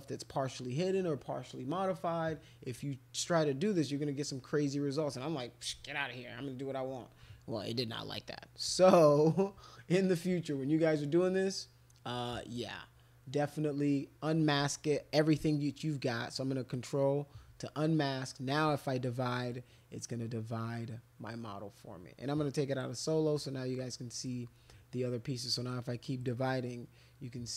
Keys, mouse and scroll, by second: 12.2 click, 16.4 ctrl+click, 18.7 click, 19.5-21.3 drag, 22.7 click, 23.4 click, 25.6 click, 26.2 click, 26.7-27.5 drag.